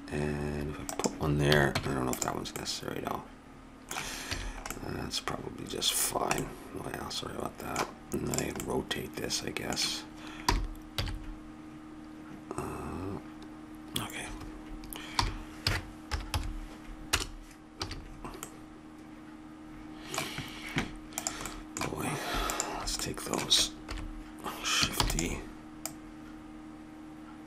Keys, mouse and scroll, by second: 1.4 a, 1.7 Tab, 4.3 a, 8.3 click, 8.6-10.4 middle drag, 10.5 r, 15.2 r, 17.8 a, 18.1 middle click, 19.7 middle click, 21.2 click, 21.5-23.9 middle drag, 23.9 click, 23.9 KP_7, 25.0 shift+d, 25.8-27.4 drag.